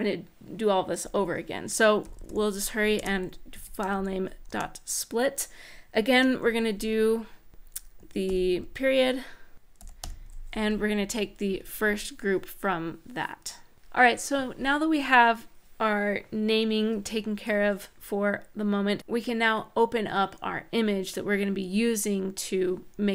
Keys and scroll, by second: 1.6-4.2 typing, 2.7 Return, 4.2 Return, 5.9 shift+9, 7.7-10.3 typing, 11.2 End.